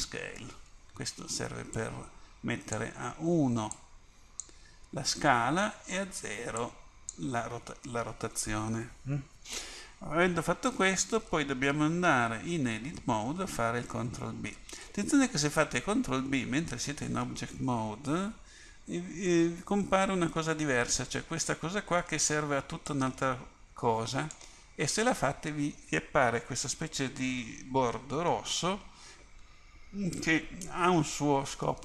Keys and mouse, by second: 1.8-12.9 drag, 12.9 Tab, 15.0 Tab, 18.8 ctrl+b.